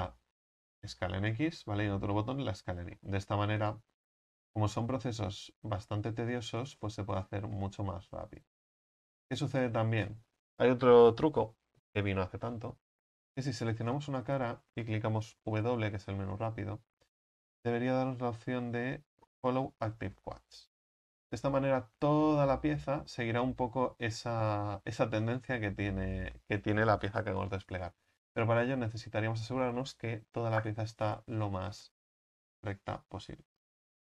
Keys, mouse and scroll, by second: 0.9 s, 2.2 s, 3.1-4.2 scroll down 3, 4.2-6.0 alt+shift+right drag, 6.0 s, 7.3 right click, 8.2 s, 9.0 right click, 10.0 s, 13.4-14.1 drag, 14.1-20.6 right drag, 25.8 ctrl+z, 32.6-32.9 drag, 32.9 right click, 33.6-34.0 alt+shift+right drag.